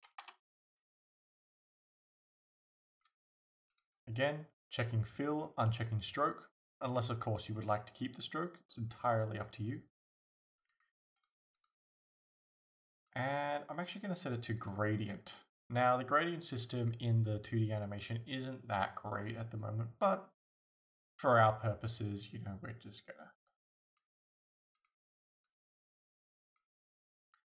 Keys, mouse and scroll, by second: 0.3 Return, 3.8 click, 9.4 click, 13.1-21.5 drag.